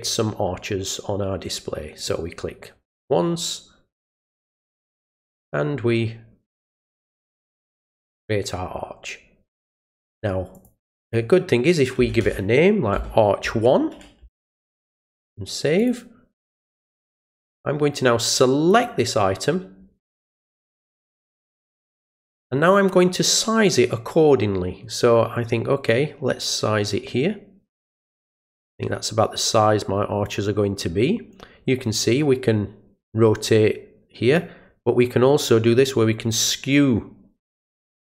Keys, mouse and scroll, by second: 2.0 click, 3.9-7.6 drag, 10.5 click, 11.0 click, 15.8 click, 17.4 click, 18.7 click, 25.9-30.2 drag, 32.0-34.3 drag, 35.0-38.0 drag.